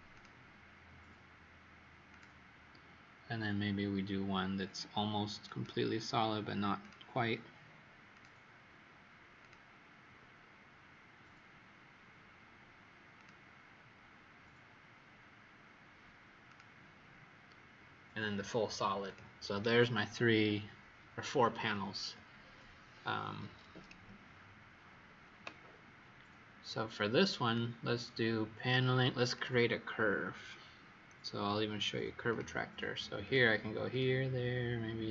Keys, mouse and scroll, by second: 19.7-21.4 scroll down 3, 22.3-26.7 scroll up 2, 27.3 click, 33.8 click, 35.0 click.